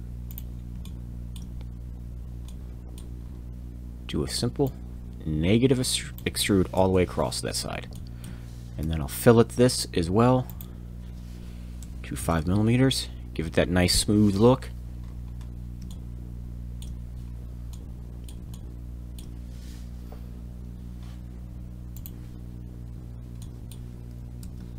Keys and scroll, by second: 6.7 Return, 8.8 f, 8.8 f, 11.8 5, 12.2 m, 13.9 Return, 24.4 shift+c.